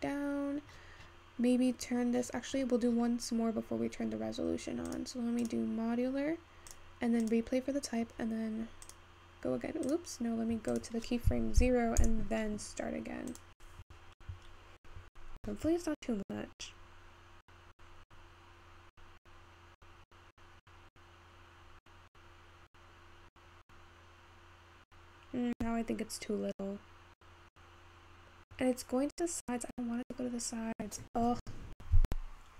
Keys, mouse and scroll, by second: 0.0-2.9 scroll down 10, 2.9-5.7 scroll down 1, 5.7-14.7 drag, 14.7-17.6 scroll down 2.